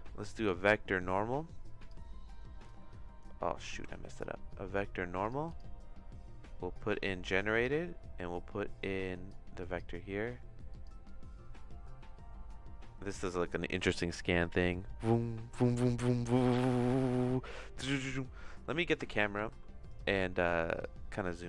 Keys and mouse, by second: 3.6 shift+a, 7.1 click, 9.3 click, 10.7 click, 11.0-18.0 drag, 19.3 shift+`, 20.8 click.